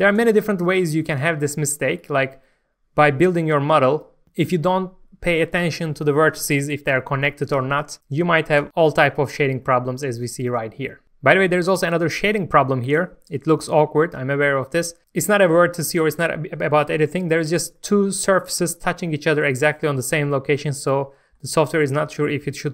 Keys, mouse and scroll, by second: 1.9 right click, 2.6-3.0 scroll down 1, 3.7 middle click, 4.2-8.6 scroll up 1, 8.6 Tab, 8.7-9.2 scroll down 1, 9.5 scroll up 1, 9.6 middle click, 10.5 scroll up 1, 10.9 middle click.